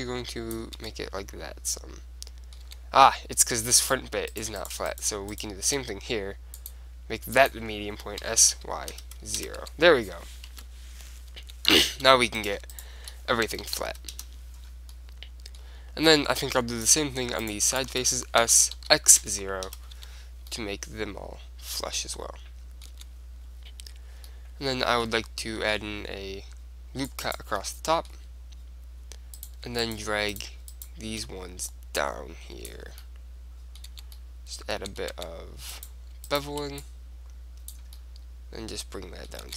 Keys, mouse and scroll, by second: 0.8-1.8 drag, 1.0 Tab, 1.8 middle click, 2.9 Tab, 4.0-7.2 right drag, 6.7-8.5 drag, 8.5 s, 9.7 Tab, 10.6 KP_1, 11.1 middle click, 11.7 Tab, 12.5-13.7 drag, 13.7 middle click, 13.7 s, 14.4 right click, 15.2-16.8 middle drag, 17.0 click, 17.5-18.7 middle drag, 18.7 right click, 18.7 s, 20.1 Tab, 20.6-22.3 middle drag, 23.1 Tab, 24.4-26.1 middle drag, 25.7 ctrl+r, 27.5 right click, 27.7-29.2 drag, 29.2 middle click, 29.5-32.6 right drag, 31.8-33.7 drag, 33.1 right click, 33.7-35.8 middle drag, 34.1 Tab, 35.3 Tab, 35.8-38.8 drag, 36.9-38.1 right drag.